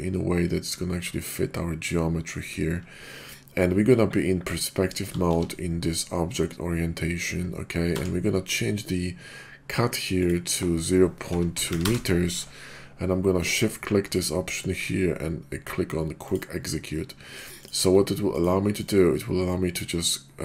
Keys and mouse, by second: 5.2 shift+v, 7.9 d, 14.0-16.5 shift+drag, 17.5-19.1 shift+drag.